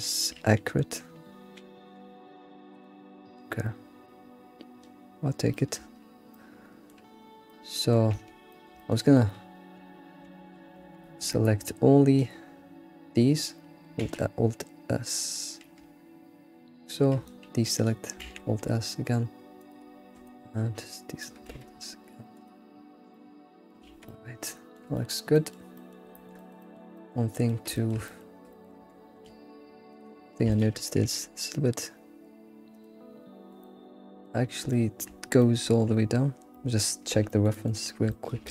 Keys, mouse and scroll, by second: 1.8 g, 4.0 scroll down 2, 5.5-8.1 shift+middle drag, 8.1 Tab, 8.5 middle click, 9.8 Tab, 10.3 alt+x, 10.7 Tab, 10.8 alt+x, 11.2 Tab, 11.6 ctrl+click, 12.2 ctrl+click, 14.0 alt+s, 17.2 ctrl+click, 18.2 alt+s, 20.2 ctrl+Left, 21.5 alt+s, 22.9 scroll down 2, 23.1 middle click, 23.3 alt+s, 23.8 alt+x, 24.0 middle click, 25.3 alt+middle click, 26.3 alt+middle click, 26.6 middle click, 27.7-28.1 shift+middle drag, 28.5 shift+middle click, 28.8 Tab, 29.0 scroll up 2, 29.3 alt+x, 29.9 click, 30.5 ctrl+click, 30.9 g, 33.6 middle click, 34.4 scroll down 1, 34.7 shift+middle click, 35.2 scroll down 1, 35.4 middle click, 36.1-36.5 scroll down 4, 36.5-38.5 middle drag.